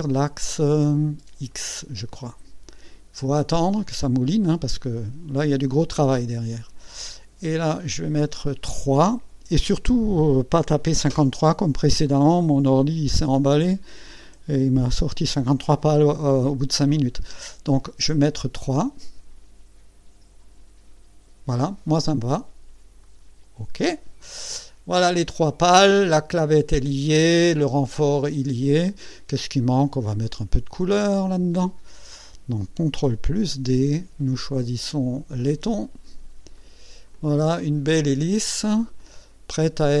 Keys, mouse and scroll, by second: 1.5 click, 7.8 click, 18.0 KP_3, 23.0 click, 24.3-27.8 drag, 31.9 click, 33.3 ctrl+d, 34.5 click, 35.4 click, 36.6 click, 37.1 click, 37.9-38.7 drag, 39.0-40.0 drag.